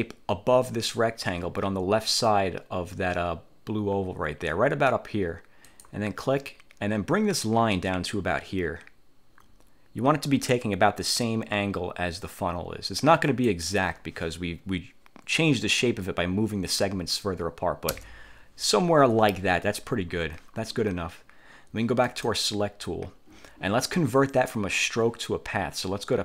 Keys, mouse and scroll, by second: 5.8 click, 13.4 click, 18.0 Return, 22.2 click.